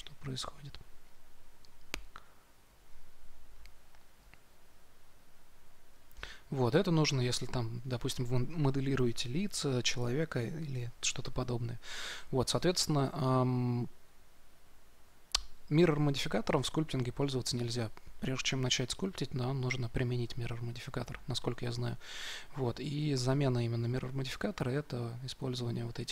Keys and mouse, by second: 0.1 f, 2.2-7.6 drag.